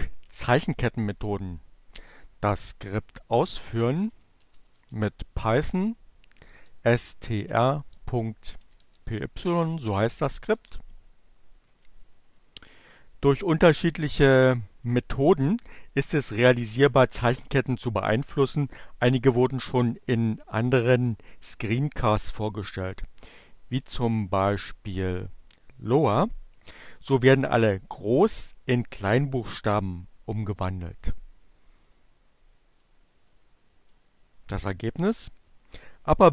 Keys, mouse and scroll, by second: 2.0-2.8 typing, 4.3-5.6 typing, 6.8-8.2 typing, 9.9 Return, 11.0-12.1 drag, 14.8 click, 32.7-33.7 drag.